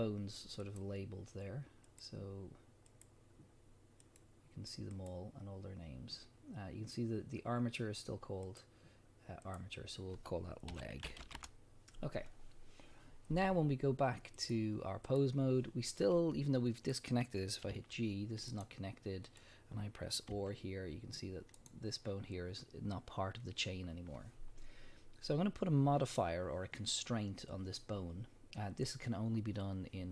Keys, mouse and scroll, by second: 1.9 click, 2.9 click, 4.0 click, 4.9 click, 8.5 click, 9.4-18.6 drag, 11.4 Return, 17.7 g, 18.6 right click, 19.3 click, 20.3 r, 21.7 right click.